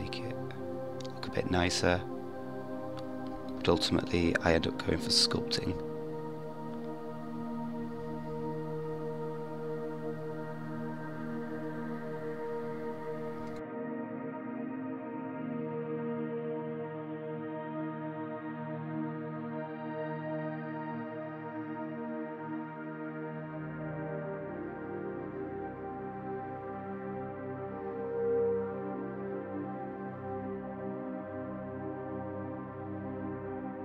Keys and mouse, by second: 0.6-2.6 middle drag, 4.1-5.7 drag, 8.2-10.0 drag, 15.7-18.1 drag, 18.7-20.8 middle drag, 20.8-22.4 middle drag, 26.5 click, 29.9-30.5 drag.